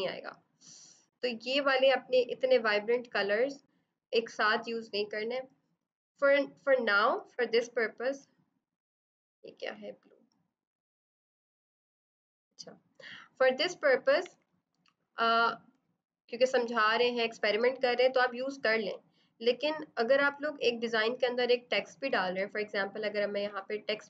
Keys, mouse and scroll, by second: 8.7 click, 10.9 typing, 12.3 click, 12.4 click, 14.2 typing, 15.0 scroll, 18.8 click, 23.4 click.